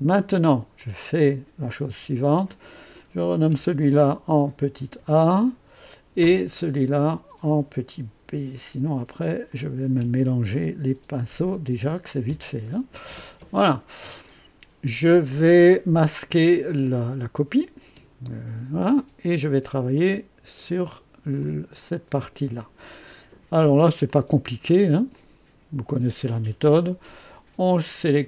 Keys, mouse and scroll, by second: 0.7 ctrl+click, 1.9 F2, 2.4 click, 3.9 -, 4.9 a, 5.5 Return, 6.9 click, 7.0-7.7 typing, 8.2 F2, 9.4 click, 11.1-12.7 typing, 17.7 typing, 18.9-19.6 drag, 19.9 click, 21.3 click, 23.0 click, 24.0 click, 25.1-26.4 drag.